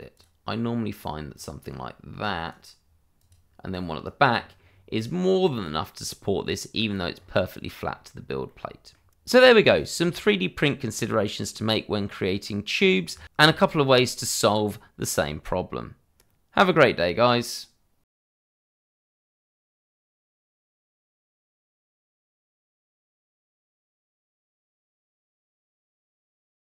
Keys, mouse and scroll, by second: 2.2 right click, 3.7 right click, 4.3-4.6 scroll down 1, 4.9 right click, 6.4 middle click, 7.1 scroll up 1, 8.1 scroll down 1, 8.4 middle click, 9.1 right click, 9.1 click, 9.7 shift+middle click, 10.0-10.3 shift+scroll up 2, 10.4 shift+middle click, 10.7 scroll up 1, 11.1 shift+middle click, 11.5-13.5 scroll up 1.